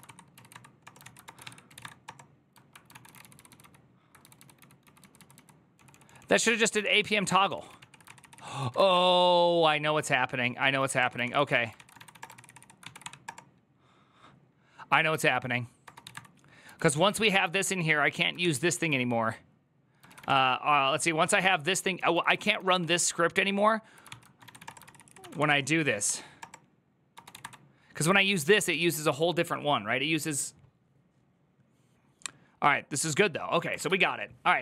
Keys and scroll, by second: 0.0-2.1 typing, 2.7 ctrl+q, 2.8 ctrl+j, 2.9 ctrl+k, 3.1 ctrl+j, 4.0-9.2 typing, 10.5-13.1 typing, 11.0 ctrl+c, 15.4-25.5 typing, 18.2 ctrl+h, 23.8 ctrl+c, 25.8 Up, 26.2 Return, 26.7-28.3 typing, 33.6 alt++.